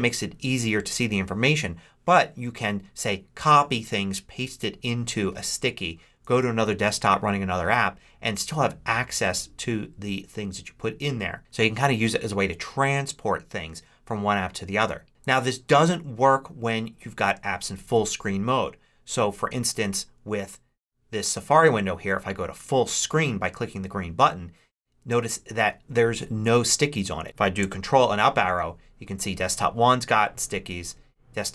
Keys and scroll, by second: 6.1 ctrl+Right, 15.3 ctrl+Left, 27.8 ctrl+Up.